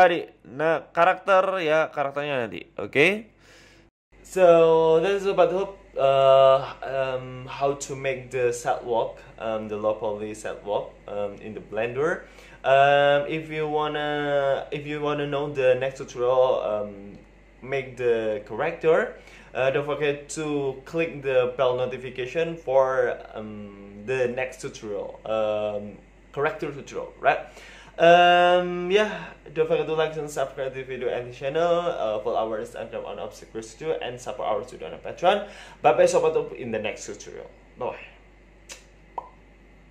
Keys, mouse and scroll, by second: 2.4 ctrl+s.